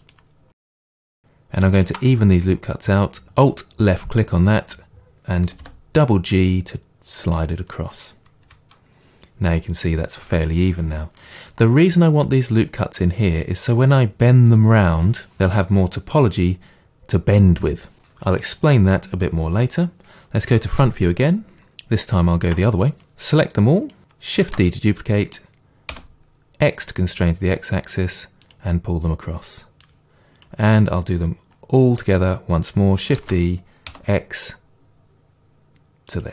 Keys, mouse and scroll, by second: 0.1 click, 0.5-1.8 middle drag, 1.8-5.1 alt+drag, 5.4 g, 7.3 click, 8.4 KP_1, 11.2-23.0 middle drag, 20.5 KP_1, 21.5 scroll down 2, 23.0 click, 24.4 shift+d, 29.8 click, 33.2 shift+d, 36.2 click.